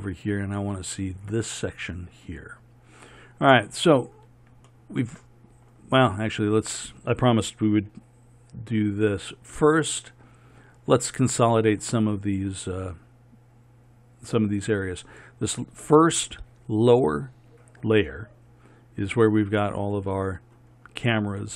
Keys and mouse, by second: 4.8-9.6 middle drag, 9.6 z, 19.8-21.3 middle drag.